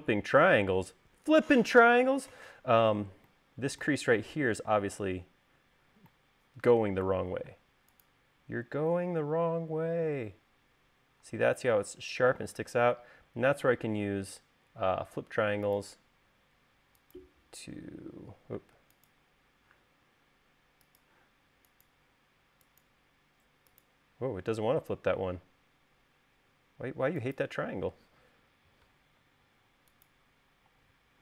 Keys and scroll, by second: 7.8 space, 18.7 space, 29.6 e, 30.9 l.